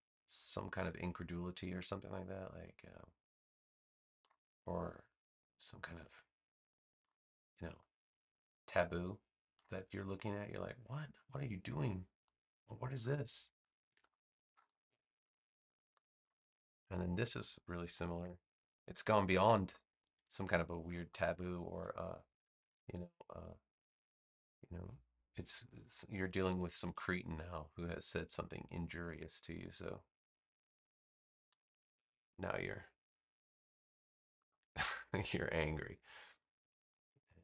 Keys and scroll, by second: 1.6 a, 13.8 space, 18.1 v, 19.3 super+c, 20.3 space, 21.7 super+v, 37.3 space.